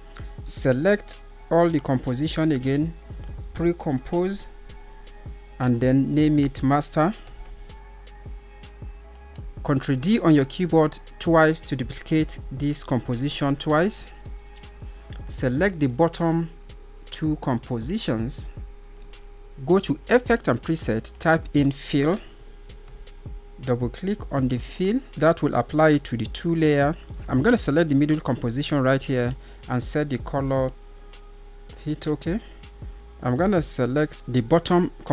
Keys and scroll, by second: 8.6 d.